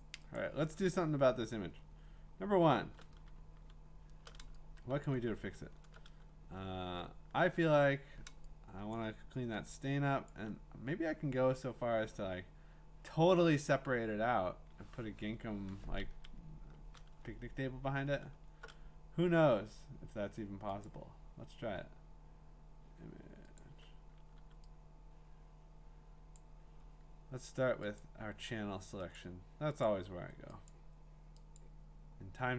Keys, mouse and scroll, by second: 0.0 click, 0.5 click, 1.1-3.2 scroll, 3.2 v, 3.6-4.4 ctrl+scroll, 5.0 click, 5.4-5.9 scroll, 7.4-8.9 w, 8.9 click, 10.3-12.1 click, 16.4 scroll, 17.2-18.0 scroll, 20.9 click, 24.4 v, 26.3-27.5 drag, 29.2 click, 29.8 click, 30.7 click, 31.6 click.